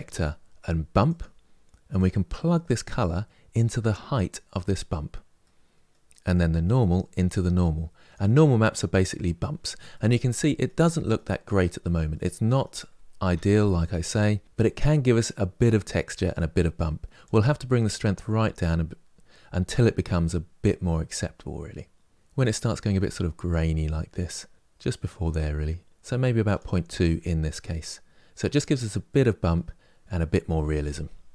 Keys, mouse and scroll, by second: 4.4 click, 6.4 click, 9.6 middle click, 10.6-11.8 scroll up 3, 11.8-17.3 middle drag, 17.3-19.9 drag, 26.8-27.3 scroll down 3, 27.3-31.3 middle drag.